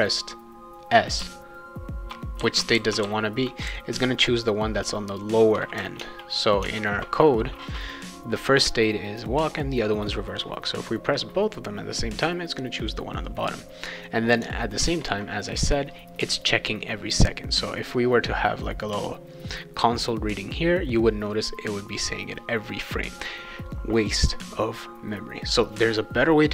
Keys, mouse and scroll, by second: 1.2 s, 2.4-4.4 typing, 6.0 alt+Tab, 6.6 alt+Tab, 14.8 alt+Tab, 17.9 click.